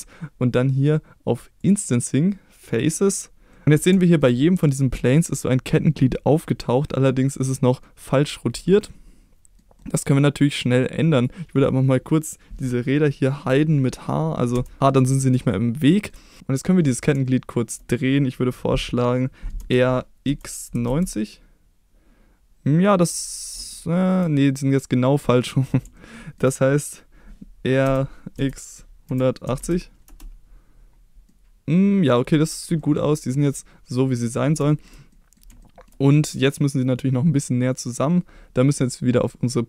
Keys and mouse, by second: 1.6 click, 2.7 click, 3.5 middle click, 4.0 shift+middle drag, 5.1-7.8 middle drag, 8.8-9.6 middle drag, 9.8-10.6 middle drag, 11.2 click, 14.5 h, 15.5-16.1 shift+middle drag, 17.2-17.7 shift+middle drag, 19.6 r, 20.3 x, 20.7 9, 20.8 0, 22.9 click, 23.7-24.1 shift+middle drag, 25.9-26.4 shift+middle drag, 27.8-29.6 typing, 30.0 Return, 31.3-32.2 middle drag, 32.8 middle click, 34.7 shift+middle click, 35.1 middle click, 35.6 shift+middle drag, 37.7 click.